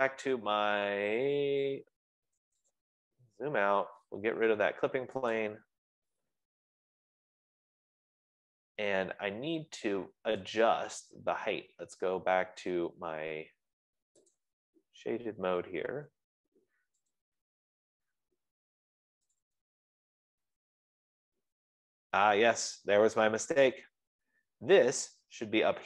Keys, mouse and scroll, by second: 5.1-5.7 scroll down 17, 5.7 scroll, 5.9 Escape, 6.1 click, 6.9-8.2 typing, 9.4 Delete, 11.1 click, 14.8 click, 16.0 scroll, 16.5-17.6 scroll, 17.6 click, 19.6 click, 20.9 click, 21.9 scroll, 22.4 scroll, 22.9-23.7 scroll, 24.3-24.7 scroll.